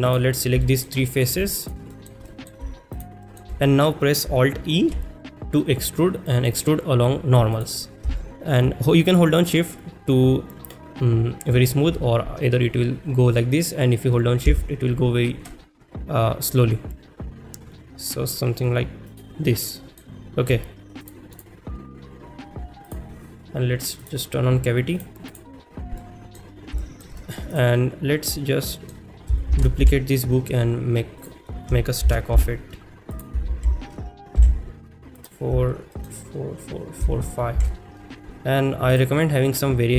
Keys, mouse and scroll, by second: 0.6 shift+middle click, 1.0 middle click, 1.6 shift+click, 1.9 shift+middle click, 2.3 middle click, 2.9 shift+click, 3.2 shift+middle click, 19.1 click, 19.5 middle click, 21.0 click, 24.0-25.2 drag, 25.3 click, 25.7-26.0 scroll up 2, 26.0-26.4 middle drag, 26.8 shift+middle drag, 27.2 middle click, 27.5 click, 28.4-28.9 middle drag, 31.2 click, 31.2 shift+d, 31.2 z, 32.1 shift+d, 32.6 z, 33.1 click, 35.2 click, 36.0 middle click, 39.5 middle click, 39.5 shift+s.